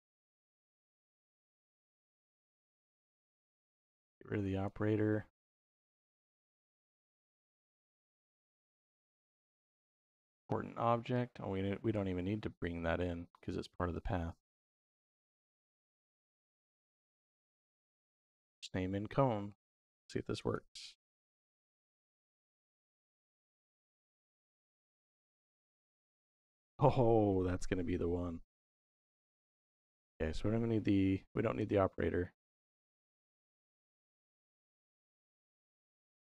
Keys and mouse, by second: 0.4-2.2 drag, 3.3-4.5 drag, 4.9 middle click, 6.0-7.1 drag, 7.5-10.0 drag, 11.0-11.8 drag, 13.3-14.7 drag, 15.2-16.7 drag, 19.3-21.5 drag, 25.6 click, 27.8-29.4 shift+middle drag, 30.1 click, 31.4 x, 32.8 click, 35.3 click.